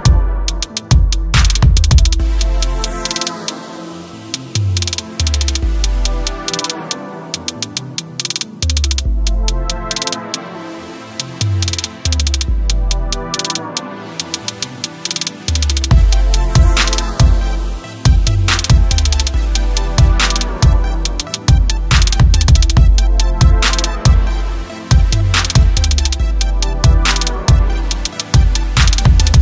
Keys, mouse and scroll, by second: 0.0-4.1 typing, 1.5 click, 5.0 click, 7.8 click, 9.3 space, 9.9 click, 10.4 s, 10.9 click, 12.1 space, 12.7 click, 13.0 space, 16.4 space, 16.7 click, 18.0 click, 19.9 click, 21.4-24.7 typing, 22.6 click, 25.0 click, 26.9 space, 27.8 space, 28.2 click.